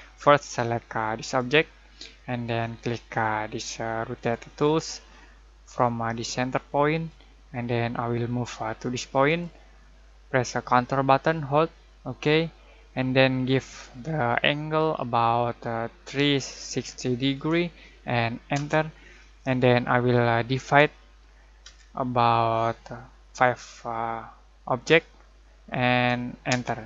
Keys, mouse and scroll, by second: 1.2 click, 4.1 click, 6.9 click, 9.2 click, 16.1-17.3 typing, 18.5 Return, 21.6 /, 24.8 typing, 26.5 Return.